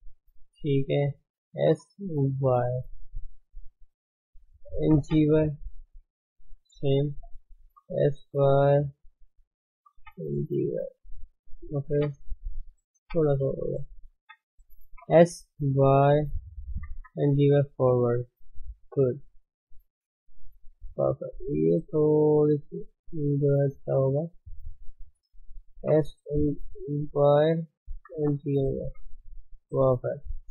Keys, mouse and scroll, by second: 0.8 shift+z, 1.6 s, 4.1 shift+z, 4.9 g, 6.1 shift+z, 6.9 click, 7.1 shift+z, 7.7 s, 9.9 g, 11.6 shift+z, 11.9 Tab, 12.6 shift+middle click, 13.2 scroll up 2, 13.7 shift+z, 14.1 Tab, 14.9 5, 15.1 s, 16.8 g, 18.7-19.4 scroll down 3, 18.9 shift+middle click, 19.4 shift+z, 20.3 shift+z, 20.7 shift+z, 22.5 click, 24.5 shift+Left, 24.9 shift+z, 25.8 s, 28.0 g, 28.9 Tab, 29.1-29.6 scroll down 5, 29.6-30.4 middle drag, 30.4 ctrl+s.